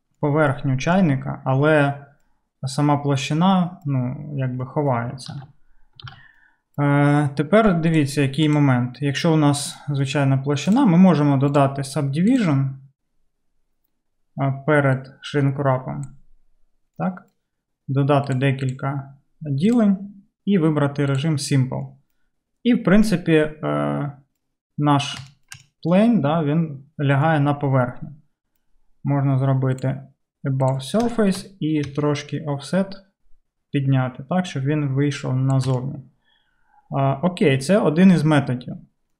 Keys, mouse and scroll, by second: 5.4 alt+z, 6.1 alt+z, 6.1 alt+z, 8.5 click, 10.8 click, 12.4-16.2 drag, 16.2-18.4 middle drag, 18.4-21.2 drag, 21.2-31.1 middle drag, 31.1-39.1 shift+drag.